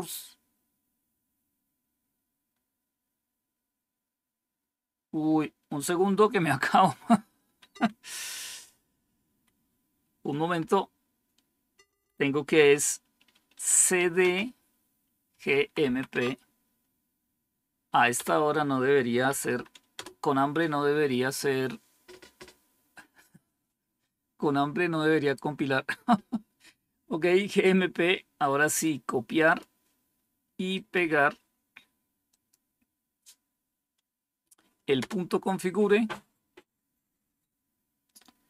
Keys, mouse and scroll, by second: 7.6 Down, 9.2 Up, 10.5 BackSpace, 11.1 BackSpace, 11.2-11.8 BackSpace, 14.1 typing, 15.4-16.0 typing, 18.1 typing, 19.4 typing, 19.9 Tab, 28.6 right click, 29.4 click, 30.7 right click, 32.2 click, 35.1 Return.